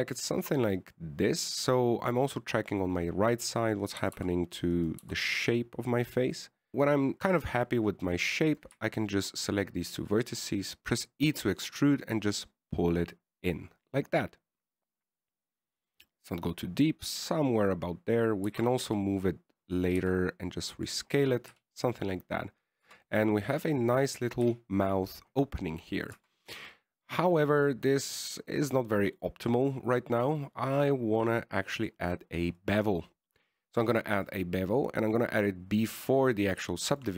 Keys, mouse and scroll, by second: 5.2 right click, 5.3 g, 6.3 g, 7.5 click, 9.8 right click, 10.3 shift+right click, 10.8 e, 17.4 middle click, 19.8 g, 21.3 s, 22.8 KP_1, 24.2 Tab, 24.4 middle click, 25.8 KP_1, 27.5 Tab, 30.7 Tab, 33.1 click, 35.6 click.